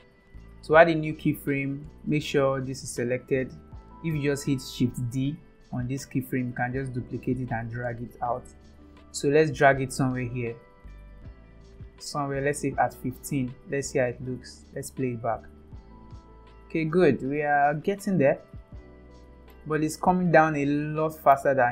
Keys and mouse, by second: 0.2 a, 1.0 click, 2.3 click, 5.2 shift+d, 14.4 click, 15.0 space, 16.1 click, 17.2 click, 18.3 click, 19.4 click, 20.5 click.